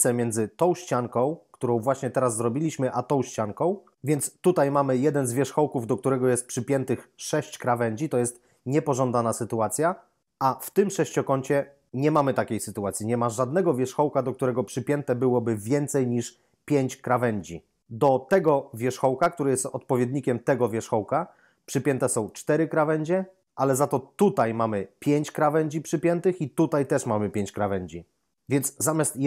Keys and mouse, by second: 18.2 right click, 24.2 right click, 26.6 right click.